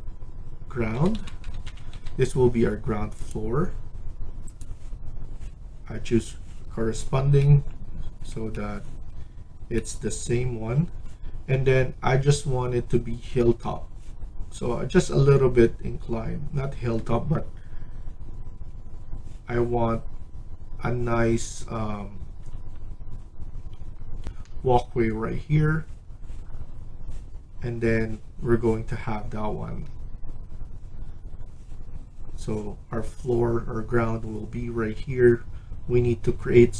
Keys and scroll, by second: 0.0-2.3 typing, 9.0 Escape, 10.6 Escape, 24.1 F1.